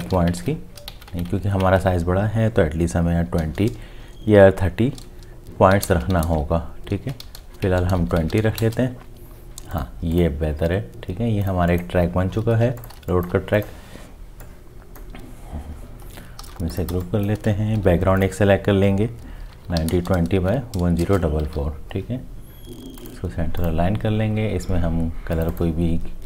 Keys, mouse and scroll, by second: 0.0 Tab, 0.1 5, 1.1 shift+Tab, 3.3 2, 4.0 0, 5.0 Tab, 5.7-8.5 typing, 6.0 Tab, 7.6 Tab, 8.2 Tab, 8.6 Return, 12.6 space, 13.0 space, 16.4 ctrl+g, 16.9 space, 17.8 m, 19.5 9, 19.8 2, 19.9 0, 20.4 t, 21.0 Return, 21.5 v.